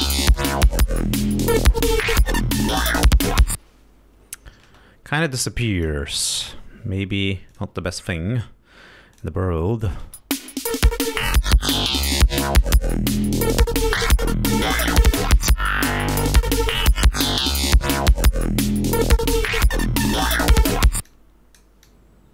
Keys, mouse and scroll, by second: 2.7 click, 5.0 space, 6.0 click, 7.9 click, 9.5 click, 10.2 click, 10.5 space, 11.0 click, 11.7-13.2 drag, 16.1-17.2 drag, 19.6 click, 20.6 click, 21.4 click, 22.2-22.3 drag.